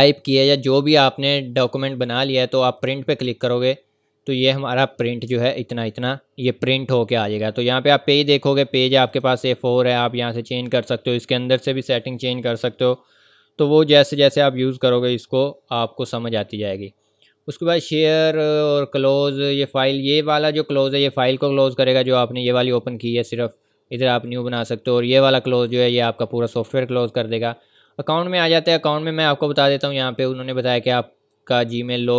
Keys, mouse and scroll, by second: 2.8 click, 5.3 ctrl+Num_Lock, 5.3 ctrl+scroll up 1, 5.9 ctrl+scroll down 1, 9.1 click, 27.7 click, 31.3 click.